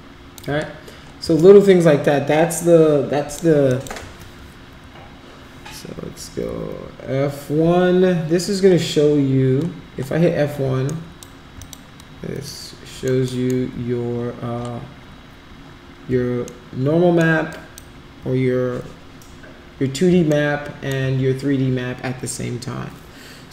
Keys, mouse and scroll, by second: 1.3-3.3 alt+drag, 3.7 alt+click, 6.5 F1, 10.6 x, 10.9 right drag, 11.5 click, 12.5 alt+middle click, 13.3 alt+middle click, 16.5 alt+middle click, 17.4 alt+click, 20.3 alt+middle click.